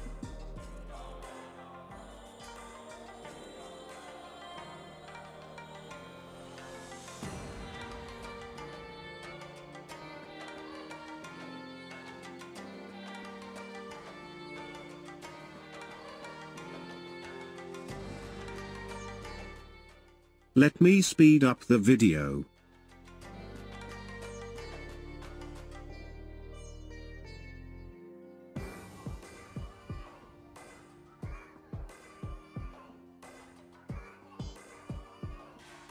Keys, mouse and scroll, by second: 2.1-7.3 drag, 9.6-12.7 drag, 13.4-16.4 drag, 19.6-21.1 drag, 21.4 click, 22.3 click, 23.1 shift+click, 24.1-25.1 drag, 25.8-27.8 drag, 28.8-30.2 drag, 30.4-31.6 drag, 31.9-35.9 drag.